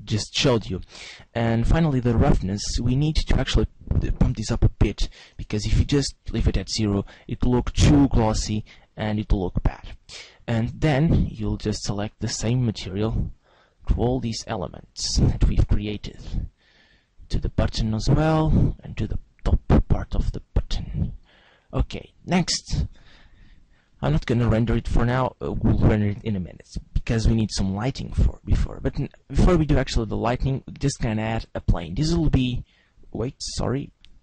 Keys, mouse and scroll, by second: 3.3 click, 10.7 right click, 11.9 click, 13.4 right click, 14.6 click, 16.4 right click, 17.5 click, 19.1 right click, 19.9 right click, 21.2 click, 30.1 shift+a, 33.9 ctrl+z.